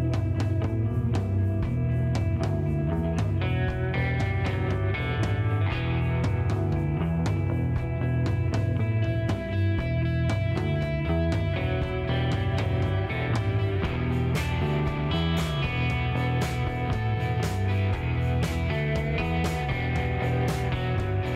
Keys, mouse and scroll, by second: 0.0 right click, 0.0-2.3 typing, 0.9 right click, 1.7 click, 2.3 click, 4.4-6.3 typing, 5.3 right click, 5.9 click, 6.3 click, 8.2 a, 8.6 c, 9.6 r, 11.7 super+z, 12.2 r, 12.8 click, 13.0 s, 15.7 middle click, 15.7 g, 17.6 c, 19.0-20.0 right drag, 20.2 g.